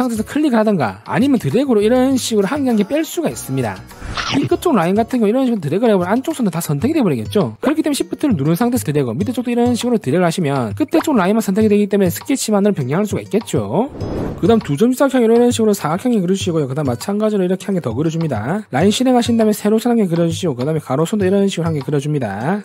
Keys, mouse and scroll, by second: 0.4 ctrl+click, 1.7 ctrl+click, 2.6 ctrl+click, 6.0 click, 8.7 shift+click, 10.2 shift+click, 15.6 3, 16.2 click, 17.0 click, 17.9 click, 19.0 1, 20.0 click, 21.2 click, 21.9 click.